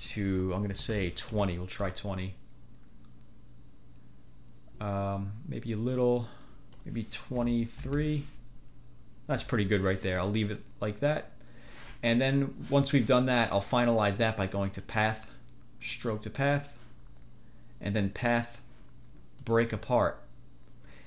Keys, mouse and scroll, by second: 0.8 2, 1.1 0, 1.4 Return, 6.5 click, 7.4 2, 7.9 3, 8.1 Return, 14.8-15.2 scroll up 1, 15.9-16.3 scroll up 1, 18.3 click.